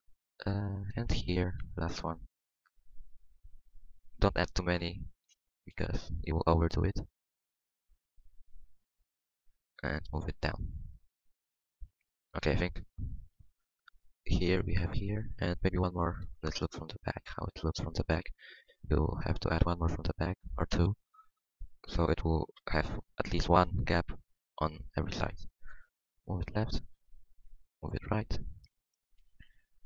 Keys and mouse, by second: 4.8 g, 6.2 g, 6.2 v, 8.0-9.4 drag, 8.5 g, 9.9-11.2 drag, 10.0 g, 11.3 g, 12.4 Tab, 18.2 Tab, 25.7 v, 27.4 g.